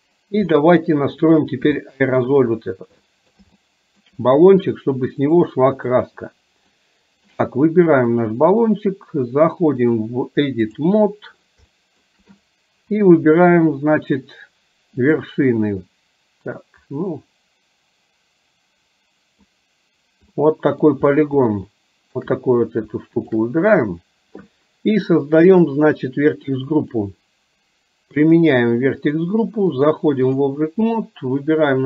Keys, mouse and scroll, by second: 0.5 middle click, 1.9 shift+middle click, 3.1 middle drag, 3.6 shift+middle click, 5.3 click, 6.8 middle click, 8.1 click, 9.9-10.9 drag, 11.8 shift+middle click, 12.5 click, 15.1 click, 16.9-19.6 drag, 20.4 middle click, 21.5 shift+middle click, 25.5 click, 27.0 click, 28.3 click, 29.9 click.